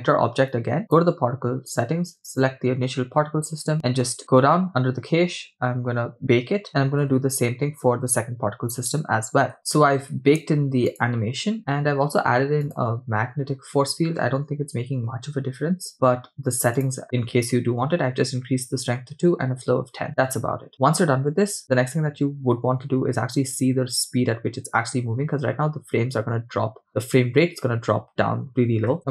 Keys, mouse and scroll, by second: 0.9 click, 4.4-5.1 scroll down 2, 5.1-6.2 scroll down 4, 7.0-7.7 scroll up 5, 9.5 scroll down 2, 11.1 drag, 12.7 click, 16.8 click, 20.7 scroll down 2, 21.6-22.3 scroll up 1, 29.0 space.